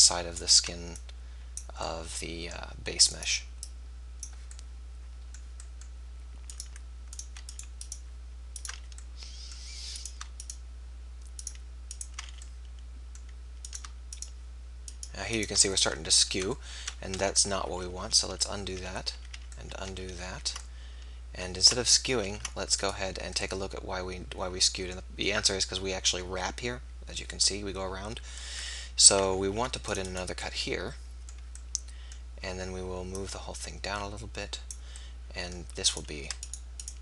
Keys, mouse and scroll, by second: 0.7-2.2 drag, 1.1-2.2 right drag, 3.2 middle click, 3.6-5.4 drag, 3.6-5.0 right drag, 6.5-10.4 drag, 8.7 f, 12.3 f, 15.4 click, 16.6 middle click, 17.6-18.2 ctrl+z, 18.8 ctrl+z, 19.2 ctrl+z, 19.4 ctrl+z, 20.0 ctrl+z, 20.2 ctrl+z, 22.2 ctrl+r, 29.5 ctrl+r, 33.1-34.9 drag, 35.9-37.0 right drag.